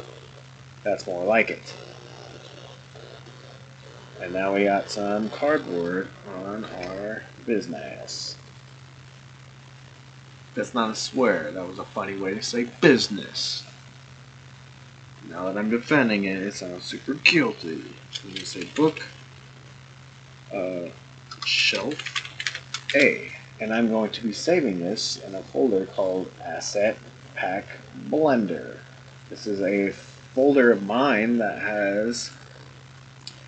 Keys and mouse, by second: 1.6-2.5 middle drag, 2.8 click, 3.8-5.6 middle drag, 6.7 ctrl+s.